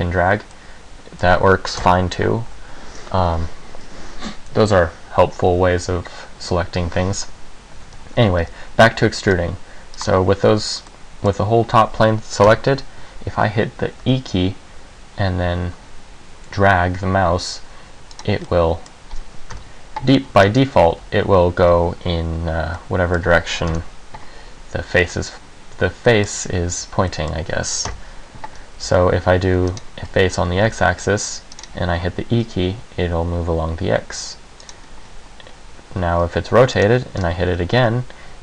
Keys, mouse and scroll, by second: 0.7 middle click, 2.0 KP_1, 2.7 a, 7.9 a, 8.3 a, 8.6 c, 10.2 click, 11.1 middle click, 12.6 KP_1, 14.2 e, 18.3 click, 18.6 middle click, 19.7 KP_1, 20.6 scroll down 1, 21.1 g, 22.9 middle click, 23.9 KP_1, 25.3 a, 26.2 middle click, 27.3 middle click, 28.0 KP_1, 28.9 c, 30.0 right click, 30.7 c, 31.7 click, 32.5 e, 34.8 click, 36.3 r, 37.0 click, 37.3-37.6 scroll down 1, 37.6 e.